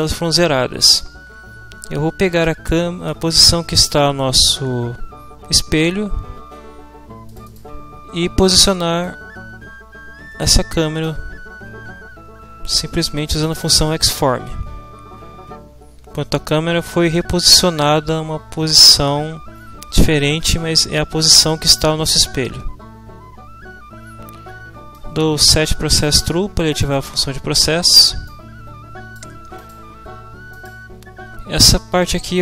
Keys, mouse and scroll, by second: 3.1 click, 7.2 middle click, 9.0-11.2 drag, 13.3 click, 24.9-26.2 middle drag, 26.7 click, 29.6 click, 31.7-32.4 middle drag.